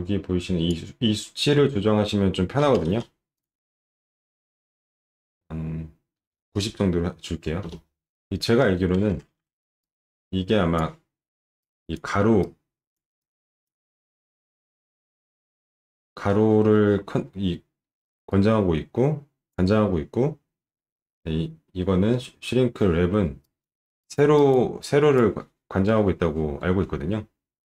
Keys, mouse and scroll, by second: 3.3 click, 6.0-6.8 typing, 7.6 Return, 9.4 ctrl+shift+9.